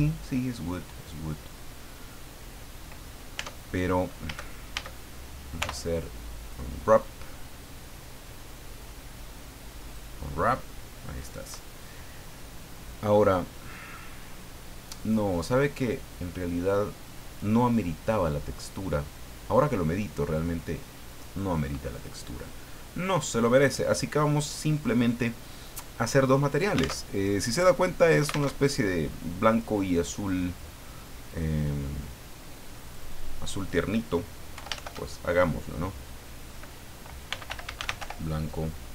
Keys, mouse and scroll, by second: 1.0-1.4 scroll down 2, 3.3 Tab, 4.2 a, 5.6 u, 9.8 click, 13.0-13.5 scroll down 2, 20.1 scroll up 2, 21.0 click, 23.3 click, 26.9 alt+Tab, 28.4 alt+Tab, 32.8 click, 34.5 Home, 37.0-38.5 typing.